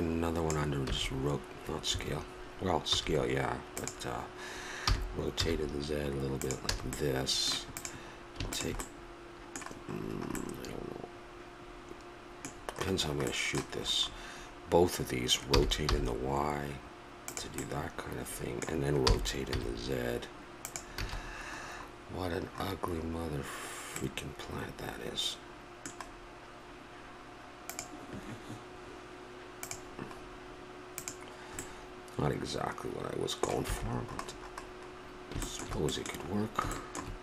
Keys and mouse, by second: 0.9 s, 2.9 s, 4.8 r, 6.8 a, 7.8-10.1 drag, 10.1-12.6 middle drag, 15.5 r, 19.0 r, 21.0 a, 24.9-27.8 middle drag, 30.2 middle click, 31.0-32.9 right drag, 33.6 a, 36.3 middle click.